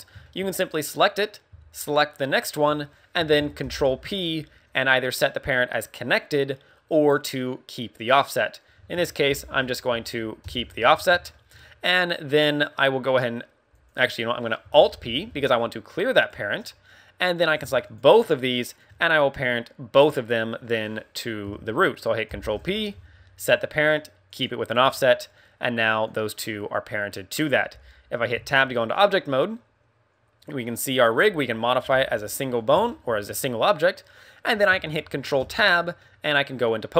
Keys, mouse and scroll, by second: 0.2 shift+middle click, 0.8 right click, 2.2 shift+right click, 3.6 ctrl+p, 9.2 ctrl+p, 10.9 a, 11.3 shift+middle click, 11.7 middle click, 13.0 right click, 13.7 right click, 14.7 alt+p, 17.3 right click, 17.8 shift+right click, 18.6 right click, 19.1 middle click, 22.2 ctrl+p, 24.8 a, 25.9 right click, 26.4 middle click, 28.3 Tab, 28.5 scroll down 3, 28.8 middle click, 30.6 middle click, 31.1 g, 32.6 right click, 32.8 shift+middle click, 33.2-33.7 scroll up 2, 35.4 ctrl+Tab, 35.9 middle click.